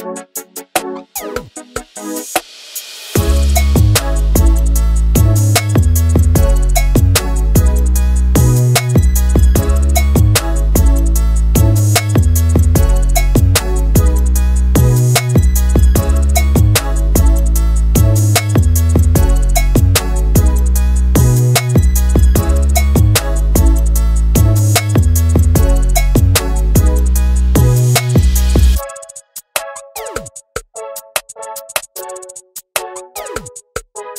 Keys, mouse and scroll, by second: 0.0 ctrl+space, 2.1 ctrl+b, 2.3 shift+middle click, 2.8 z, 3.2-3.7 scroll up 1, 3.7-4.0 scroll down 1, 4.0-5.0 shift+middle drag, 5.2 ctrl+b, 5.8 shift+middle click, 6.0-6.5 scroll up 3, 6.5 scroll up 1, 6.6 z, 7.2 shift+middle click, 7.4 scroll down 3, 8.5 click, 9.2 scroll up 6, 9.5 scroll down 3, 9.6 shift+middle click, 11.7 click, 12.0-12.6 scroll down 3, 12.8-18.0 drag, 18.4 click, 19.7-21.1 drag, 21.7-26.3 drag, 29.7 ctrl+space, 33.5 click.